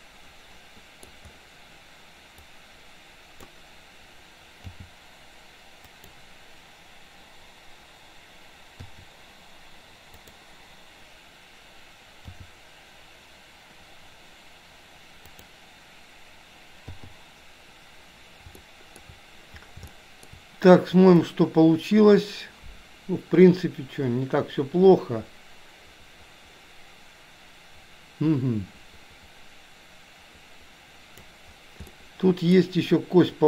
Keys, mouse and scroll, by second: 2.5 click, 4.7 g, 8.9 i, 10.4 click, 12.4 g, 17.0 i, 18.6 shift+middle click, 20.0-20.4 shift+middle drag, 21.4-31.4 drag, 32.0-32.7 middle drag.